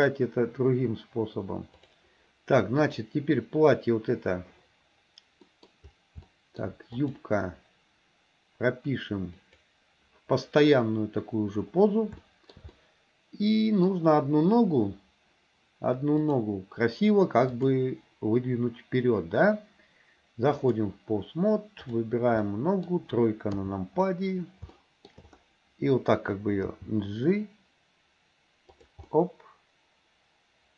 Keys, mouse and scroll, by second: 1.8 click, 2.9 click, 5.5 middle click, 6.3-6.7 shift+middle drag, 7.0 click, 9.4 click, 12.2-12.6 shift+middle drag, 12.8-13.9 middle drag, 16.3 click, 17.6-20.9 drag, 21.9 click, 22.4 middle click, 23.6 KP_3, 24.8 shift+middle click, 26.8 g, 29.2-30.7 middle drag.